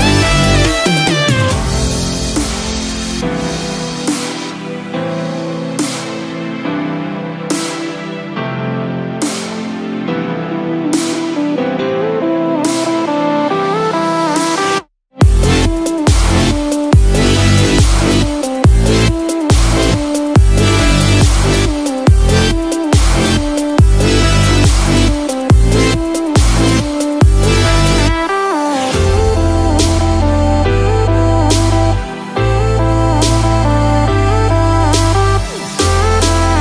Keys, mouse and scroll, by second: 5.5 click, 5.5-6.3 scroll up 5, 7.3 click, 20.1 click, 29.7 click, 32.3 middle click, 32.3 click, 32.3-32.6 scroll down 6.